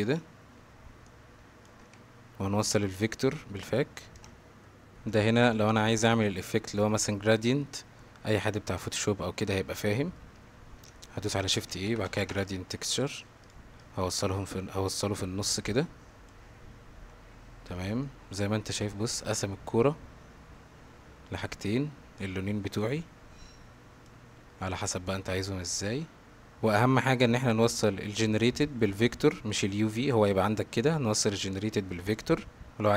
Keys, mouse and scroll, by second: 1.1-1.7 alt+drag, 1.8 x, 2.8-3.6 drag, 6.4 middle click, 7.3 middle click, 8.5-10.2 middle drag, 11.4 shift+a, 14.0-16.3 drag, 18.0-18.8 middle drag, 22.2-24.1 drag, 24.7-26.5 drag, 26.5 ctrl+z, 27.0 middle click, 29.6-30.0 drag, 31.3 click, 32.7-32.9 middle drag.